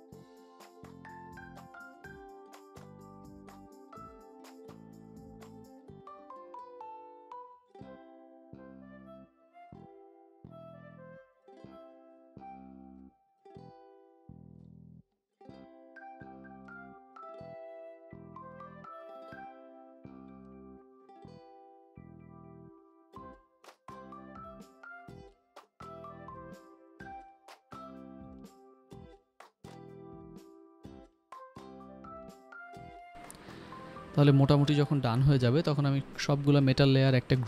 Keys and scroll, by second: 1.1 [, 1.5 9, 2.2 ctrl+s, 3.4 ], 4.2 ctrl+s, 5.1 Return, 5.4 ctrl+s, 27.9 ctrl+s, 35.2 ctrl+g, 36.3-37.4 typing.